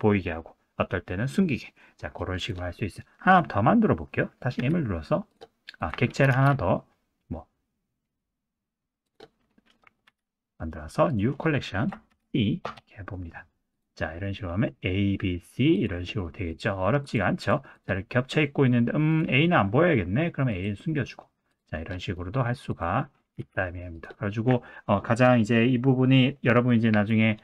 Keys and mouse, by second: 2.4 drag, 2.8 middle click, 3.2 click, 4.6 m, 6.3 shift+a, 10.1 m, 15.7 click, 16.3 middle click, 17.4 click, 20.5 click, 21.5 click, 22.1 middle click, 22.7 click, 23.4 g, 26.7 click.